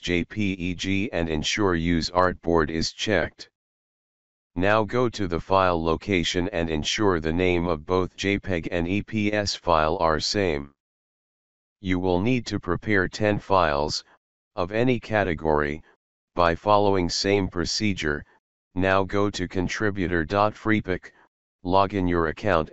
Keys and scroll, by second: 10.2 BackSpace, 10.4 BackSpace, 10.5 BackSpace, 10.8 Return.